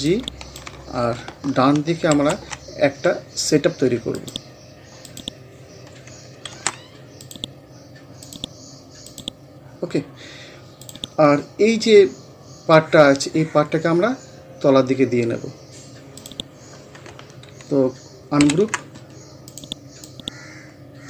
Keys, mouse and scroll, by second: 0.1-2.1 drag, 2.1 alt+F7, 4.2 click, 6.5 ctrl+z, 7.2 click, 16.2 click, 18.4 ctrl+u, 19.5-21.0 drag.